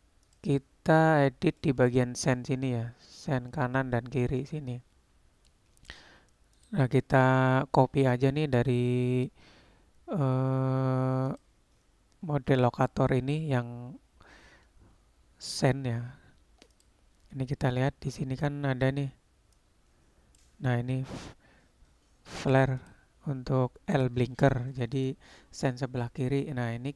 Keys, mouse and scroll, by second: 1.7-2.5 middle drag, 3.3 click, 4.4-5.6 middle drag, 6.7 click, 11.3 click, 16.8 click, 19.7 click, 23.0-25.1 drag.